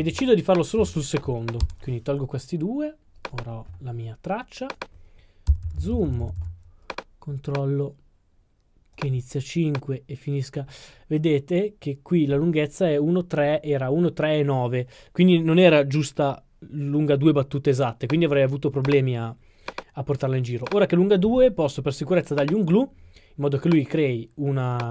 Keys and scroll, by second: 5.8-6.4 typing.